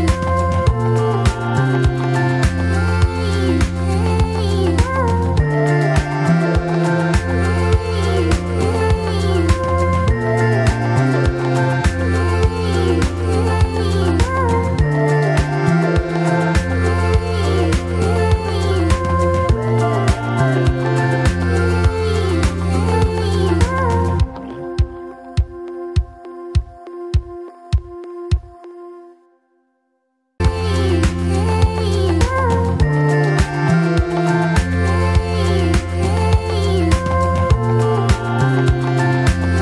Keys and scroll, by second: 0.6 ctrl+r, 0.7 ctrl+c, 3.6 2, 4.6 F4, 7.5 alt+F4, 8.3 2, 9.0 ctrl+r, 9.1 ctrl+c, 10.4 2, 10.8 F4, 12.2 F4, 15.0 F4, 16.4 2, 16.5 F4, 17.9 ctrl+r, 18.0 ctrl+c, 18.9 0, 19.0 Return, 20.4 ctrl+r, 20.7 ctrl+c, 21.4 2, 22.2 F4, 22.8 F4, 23.9 F4, 24.3 F4, 25.9 F4, 26.7 1, 30.6 2, 31.9 ctrl+z, 33.6 F4, 34.6 1, 36.0 ctrl+z, 36.7 2, 37.7 F4, 38.2 1.